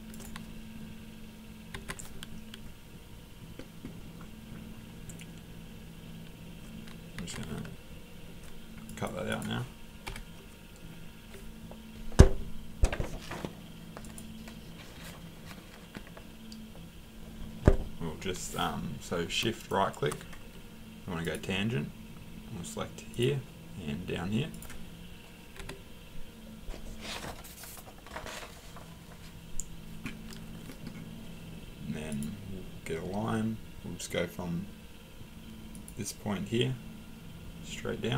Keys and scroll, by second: 1.7 Escape, 7.2 Escape, 10.1 Delete, 25.6 Escape.